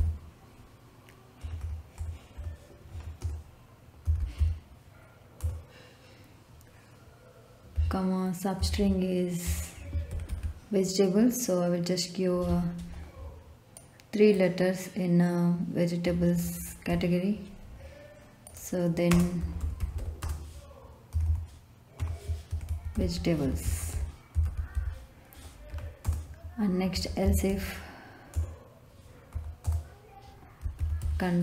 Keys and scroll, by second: 0.0-1.3 typing, 2.8 Right, 3.1-4.8 typing, 5.3 Return, 7.7 ,, 8.5 ', 9.4 Left, 9.8-10.7 typing, 16.8 g, 19.1-21.1 typing, 21.9 Left, 22.2-25.2 typing, 25.7 Right, 26.0 Return, 26.6-28.3 typing, 29.3 Down, 29.6 Return, 30.3-31.4 typing.